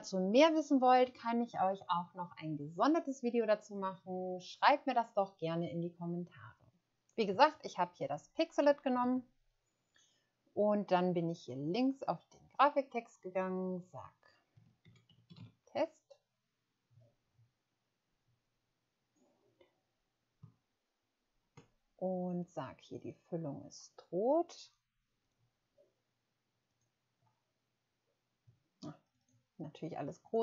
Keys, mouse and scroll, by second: 9.1 alt+Tab, 15.0-15.8 typing, 17.2 scroll up 1, 18.1 typing, 20.4 ctrl+scroll up 1, 21.1 ctrl+scroll up 1, 29.1 click.